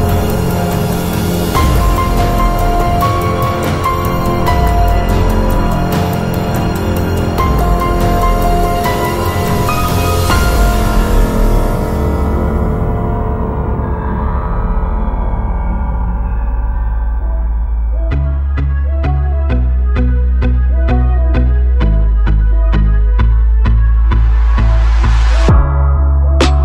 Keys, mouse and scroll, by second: 0.8 click, 1.4 click, 1.4 s, 1.7 click, 3.9 click, 5.2-6.6 right drag, 6.6-9.0 drag, 9.0 right click, 9.4 Delete, 11.0-12.7 drag, 15.0-16.4 drag, 17.0-18.8 middle drag, 20.7 s, 22.0 click, 22.3-23.5 middle drag, 24.5-26.6 middle drag.